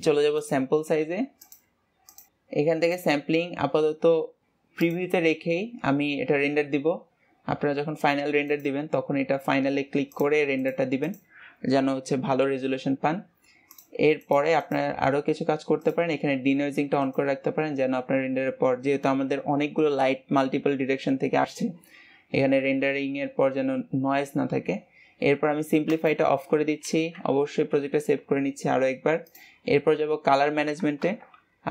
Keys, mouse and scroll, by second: 2.2-5.8 scroll down 1, 5.8-6.8 scroll down 1, 6.8-17.5 scroll down 1, 17.5 click, 26.4 click, 31.6 KP_0.